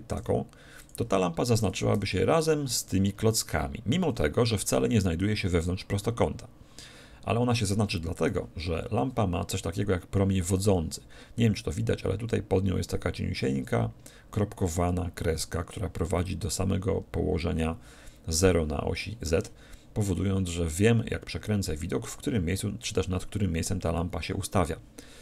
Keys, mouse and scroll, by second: 0.2 g, 0.9-2.6 drag, 1.6 a, 2.0 b, 9.9-12.0 middle drag, 20.1-22.0 middle drag.